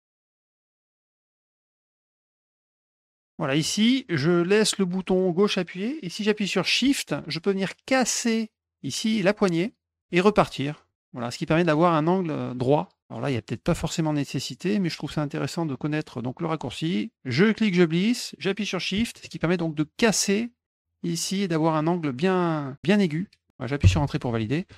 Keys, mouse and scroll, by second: 0.0 click, 0.1 click, 0.2 middle click, 0.3 click, 0.4 middle click, 0.5 click, 0.8 click, 0.9 middle click, 1.1 click, 1.3 click, 1.4 click, 1.5 middle click, 1.9 shift+click, 2.5 click, 2.7 click, 2.8 click, 3.0-10.0 drag, 10.8 click, 13.2 click, 14.5 click, 15.6 click, 17.2-23.0 drag, 23.8 Return.